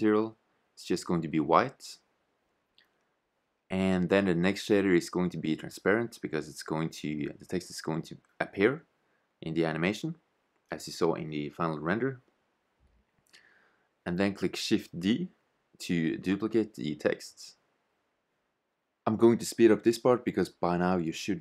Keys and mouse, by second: 3.9-5.8 drag, 7.4-9.2 drag, 12.1 shift+z, 14.7 shift+z, 19.0 shift+d, 21.0 Tab.